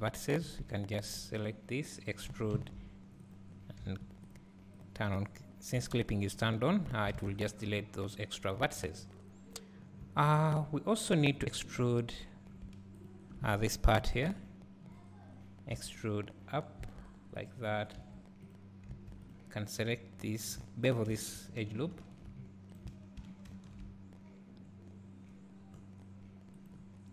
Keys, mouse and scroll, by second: 0.0 x, 0.6 2, 0.8 click, 2.4 e, 3.9 1, 4.4 click, 5.8 g, 6.5 right click, 6.8-7.2 scroll down 1, 7.2 alt+a, 7.3 scroll down 1, 8.6 2, 9.0-10.0 scroll up 1, 10.0 1, 10.4-11.8 scroll up 1, 12.4-14.3 drag, 12.4-13.1 scroll down 1, 14.3 d, 14.9 e, 18.0 2, 18.5 click, 18.9 1, 19.3 click, 21.7 ctrl+b, 22.8 right click, 23.6 ctrl+shift+b.